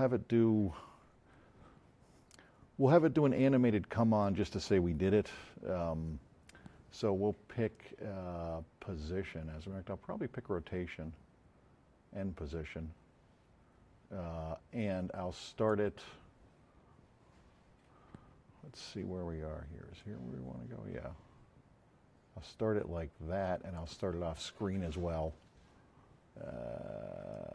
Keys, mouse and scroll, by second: 7.6 click, 14.6-15.7 drag, 19.9-23.9 drag, 27.3-27.5 drag.